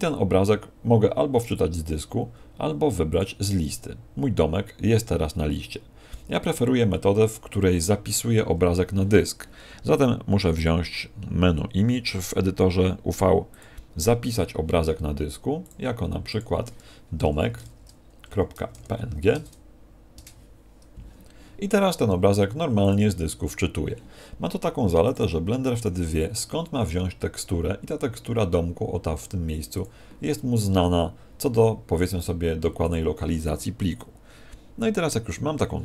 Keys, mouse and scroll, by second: 3.0 click, 10.5 click, 20.2 Return, 22.8 click, 32.9 click.